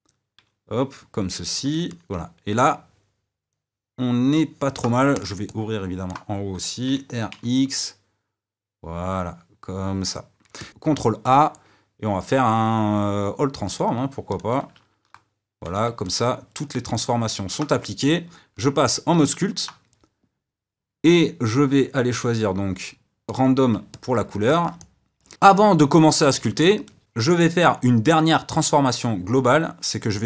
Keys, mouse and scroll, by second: 1.8-4.8 middle drag, 5.1 click, 5.4-6.8 middle drag, 6.8 r, 10.5 middle click, 10.7 click, 14.3 click, 15.7 ctrl+a, 16.0-18.6 middle drag, 18.6 click, 19.2-23.2 middle drag, 23.2 click, 23.9-25.3 middle drag, 25.3 ctrl+z, 26.8 click, 29.2 KP_1.